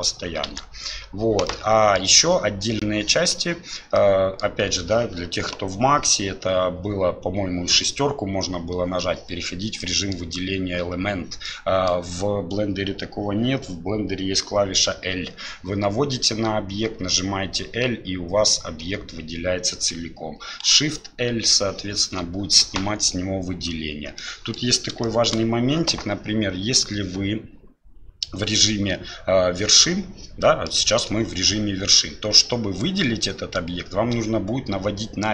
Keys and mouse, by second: 1.5 click, 4.0 click, 9.8 click, 11.4 click, 21.4 l, 24.2 middle click, 25.0 shift+middle click, 30.4 middle click, 32.6-35.3 middle drag.